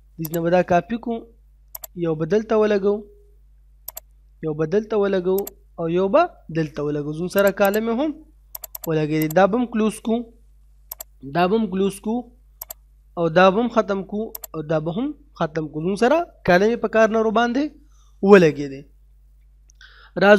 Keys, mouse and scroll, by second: 0.3 click, 2.0-2.4 scroll down 1, 2.4 middle click, 3.9 click, 4.3 scroll up 1, 5.4 click, 6.7-7.1 scroll up 1, 7.4 click, 11.5 scroll down 1, 11.7 middle click, 12.7 click, 13.3 middle click, 14.5 click, 14.9-16.3 scroll down 2, 15.2 middle click, 16.3 middle click.